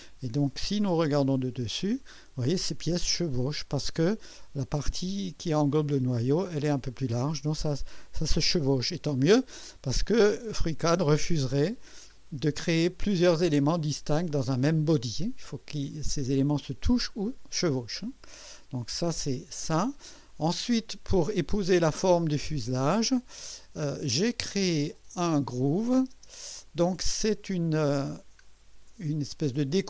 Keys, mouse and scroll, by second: 1.0 typing, 1.4 scroll up 1, 2.0 right click, 2.6 scroll up 1, 3.0 right click, 3.5 typing, 8.8-9.8 right drag, 11.8 scroll down 2, 18.0-19.2 drag, 19.4 scroll down 2, 20.7 scroll down 2, 21.2-22.1 drag, 22.1-22.5 scroll down 2, 24.9 click, 26.1 space, 27.0 click, 28.2 scroll down 1.